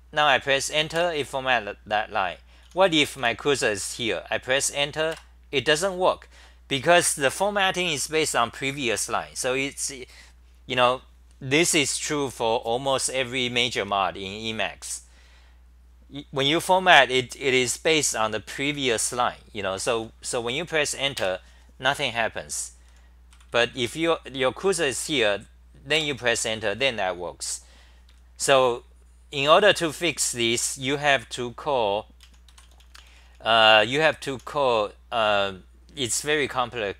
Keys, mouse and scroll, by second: 0.9 Tab, 2.6 t, 2.8 t, 3.0 t, 3.2 t, 5.1 Tab, 21.1 Tab, 23.3 c, 23.5 c, 23.7 c, 25.9 Tab, 29.2-34.8 typing.